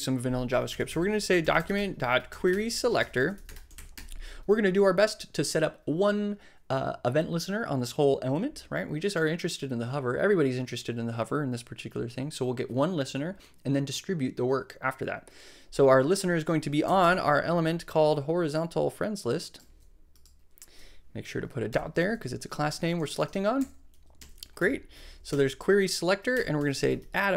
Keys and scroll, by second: 0.5-4.4 typing, 19.6 super+c, 21.9 super+., 22.0 super+v, 22.9 super+Right, 23.5 super+Right, 24.1 super+Up, 24.2 alt+Right, 24.6 alt+Return, 25.2 super+Tab, 25.3 super+Right, 26.4 Return, 26.5-27.3 typing.